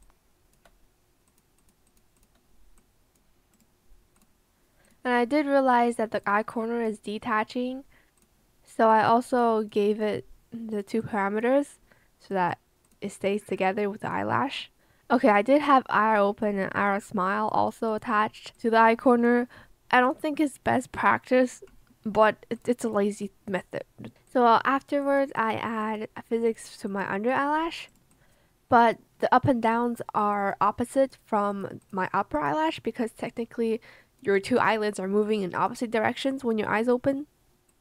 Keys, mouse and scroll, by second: 0.0 click.